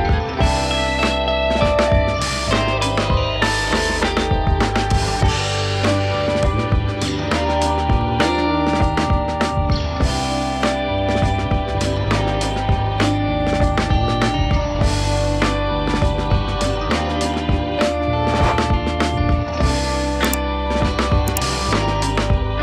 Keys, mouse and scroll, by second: 0.1 shift+middle click, 0.6-1.1 scroll up 2, 1.1 shift+z, 1.9 KP_1, 2.3 shift+z, 2.5 scroll up 2, 2.8 shift+middle click, 3.2-4.7 scroll up 1, 10.1 click, 10.4-12.2 middle drag, 12.2 k, 16.0 click, 16.3 shift+click, 16.5 shift+click, 16.8 middle click, 17.5 shift+click, 17.8 middle click, 18.1 shift+click, 18.8 KP_1, 19.3 shift+middle click, 19.6-20.3 scroll down 1, 20.3 shift+d, 21.3 p, 22.4 Tab.